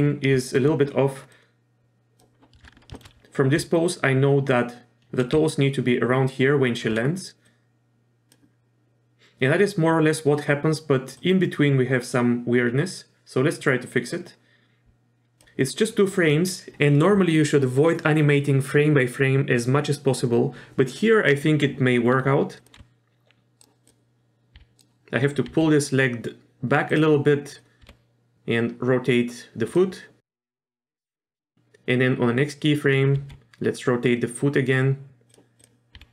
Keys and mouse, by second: 0.4 shift+middle click, 1.3 click, 2.9 shift+middle click, 3.2 d, 5.3 d, 5.5-6.9 drag, 6.7 d, 6.8 d, 7.5-8.3 drag, 11.2 click, 22.6 drag, 22.7 r, 23.8 click, 24.5 r, 25.5 r, 27.5 click, 27.8 r, 30.4 click, 33.2 r, 35.6 click, 35.9 r.